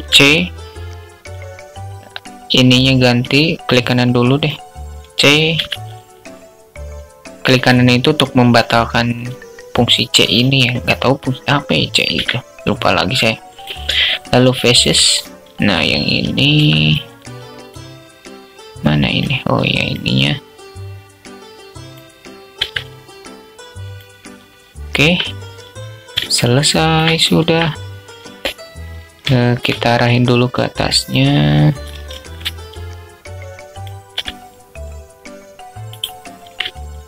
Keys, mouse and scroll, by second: 3.5 click, 4.9 c, 11.5 x, 15.9 z, 16.1 click, 16.9-17.7 drag, 18.3 click, 19.1 click, 20.8 click, 22.0 x, 24.3 Tab, 26.0-26.7 alt+shift+drag, 28.7 alt+shift+click, 29.5-30.5 drag, 31.3 shift+a, 33.5 s, 36.3 middle click.